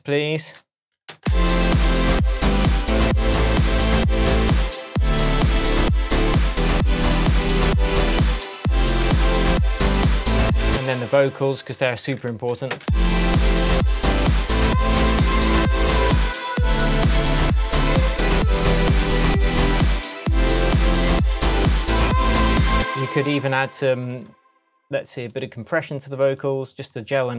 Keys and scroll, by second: 10.6 space, 12.7 space, 22.7 space.